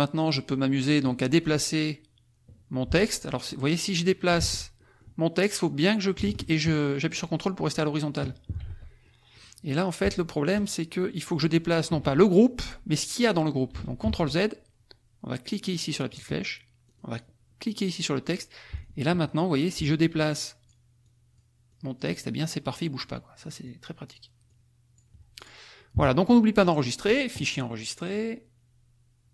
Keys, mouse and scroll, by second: 3.3 click, 4.4 ctrl+z, 4.7 ctrl+click, 5.7-7.9 drag, 8.6 ctrl+z, 9.0 ctrl+click, 10.0 ctrl+click, 14.0 ctrl+z, 16.0 click, 16.8 click, 18.8 ctrl+click, 20.3 ctrl+click, 21.0 ctrl+click, 21.7 ctrl+click, 22.2 ctrl+click, 23.0-24.3 ctrl+drag, 24.5 ctrl+click, 25.3 ctrl+click, 26.0 -, 26.6 middle click, 28.0 click.